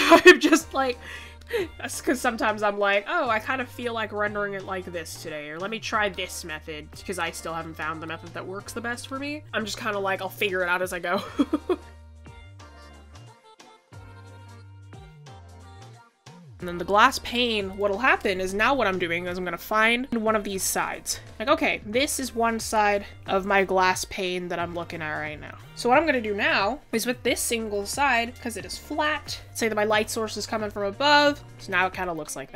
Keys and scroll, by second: 9.6 ctrl+z, 10.1 ctrl+z, 14.0-14.4 typing.